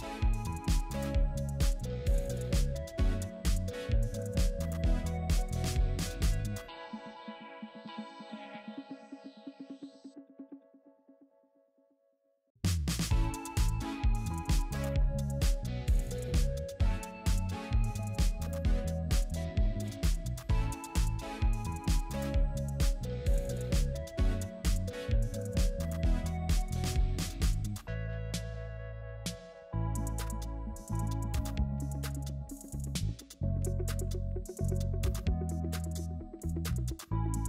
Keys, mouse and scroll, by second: 6.1 double click, 13.5-14.1 scroll down 1, 14.1-15.5 scroll up 1, 18.5 scroll down 1, 18.7-20.3 scroll up 1, 20.5 shift+click, 20.7 right click, 24.3 scroll down 1, 25.6 right click, 30.8 ctrl+t, 31.5 right click.